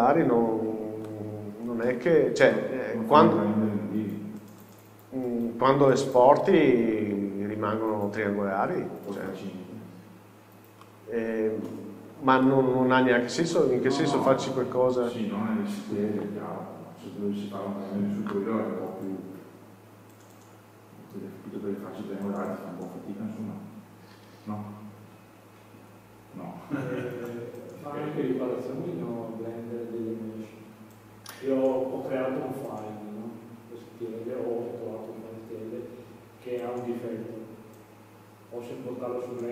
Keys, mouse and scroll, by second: 0.0 Tab, 1.1 middle click, 5.1 scroll down 1, 5.9 middle click, 7.7-8.0 scroll up 1, 8.0-10.9 middle drag, 9.7-10.1 scroll down 1, 13.6 shift+scroll up 1, 13.6 shift+middle click, 14.8-15.7 scroll up 1, 15.9 scroll down 1.